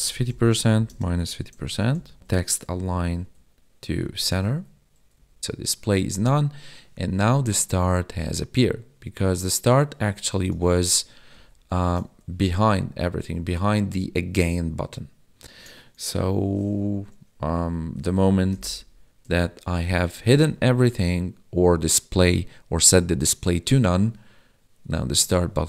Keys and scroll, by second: 0.9 space, 3.3 Tab, 4.5 ctrl+s, 5.2 Right, 5.4 ctrl+s, 10.8 ctrl+z, 11.8 ctrl+s, 18.5 ctrl+y, 20.3 ctrl+s.